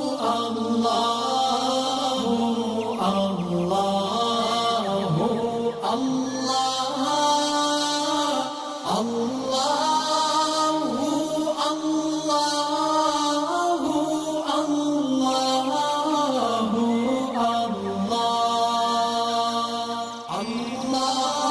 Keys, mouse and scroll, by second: 2.1 click, 2.1 click, 2.7-3.1 scroll down 1, 3.8 click, 4.2-4.6 scroll up 1, 5.4 click, 9.4 alt+Num_Lock, 9.4 alt+scroll up 1, 10.1-10.9 alt+drag, 16.5 alt+scroll down 1, 17.1 alt+scroll up 1, 17.5 click, 17.5-19.0 drag, 20.2-20.7 scroll up 2, 21.0-21.5 click.